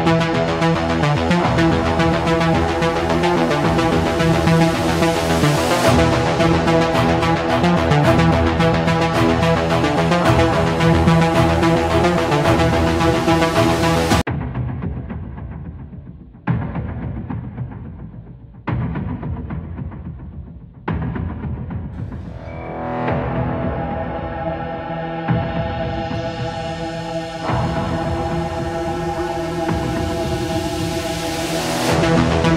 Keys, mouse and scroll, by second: 3.1 click, 6.9-8.1 scroll, 9.3 scroll, 12.3 click, 13.3 click, 15.7 click, 17.6-18.7 middle drag, 19.9-21.0 drag, 22.4 click, 23.9-25.2 scroll, 25.3 click, 26.1 scroll, 26.2 middle click, 27.7 middle click, 29.3 click, 29.5 click, 30.4 click, 30.4-31.1 typing, 31.4 Return.